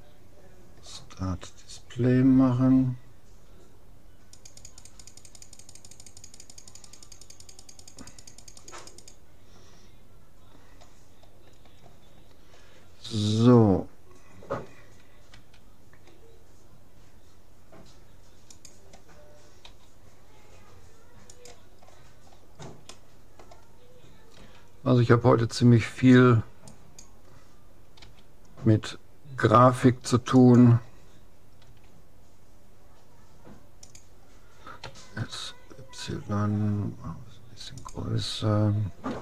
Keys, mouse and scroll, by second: 1.9-3.9 middle drag, 4.3-10.9 drag, 10.9-12.5 middle drag, 15.9 s, 19.6 g, 21.9-22.3 scroll up 1, 24.4 s, 28.0 g, 31.6 s, 34.9 s, 39.1 s.